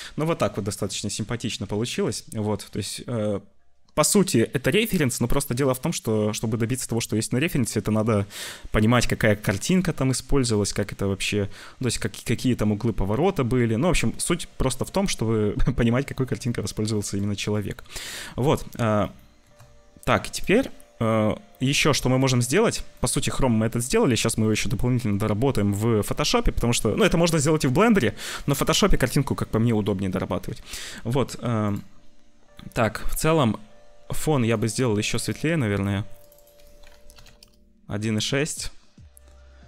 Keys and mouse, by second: 0.9 shift+middle click, 1.2 shift+click, 1.6 ctrl+s, 9.8-11.1 shift+drag, 17.0 shift+middle click, 17.8-19.4 middle drag, 22.0 click, 22.9 click, 23.8 click, 24.4 click, 34.4 click, 35.1 click, 36.2-37.3 drag, 39.5 click.